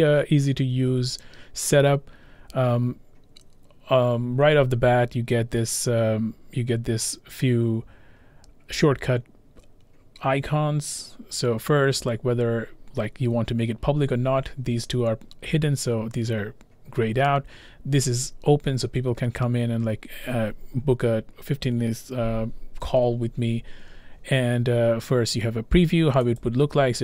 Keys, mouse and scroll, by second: 26.4 click.